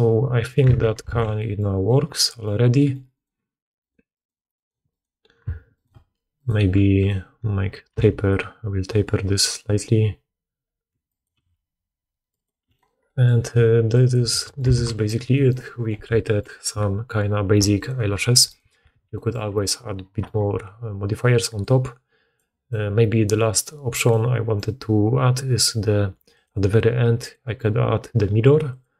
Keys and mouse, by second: 0.6 Tab, 1.0 alt+a, 1.7 click, 3.0 click, 3.0 middle click, 3.0 right click, 3.7 middle click, 4.0 middle click, 4.4 middle click, 4.8 middle click, 5.3 Tab, 5.6 middle click, 6.2 middle click, 6.8 middle click, 7.9 s, 8.8-10.1 drag, 10.9 click, 11.2 g, 12.6 click, 13.4 click, 13.4 g, 14.2 Tab, 14.6 alt+a, 15.5 middle click, 17.6 click, 18.4 click, 18.8 alt+a, 21.5-26.4 drag, 26.4 middle click, 27.2-28.9 drag.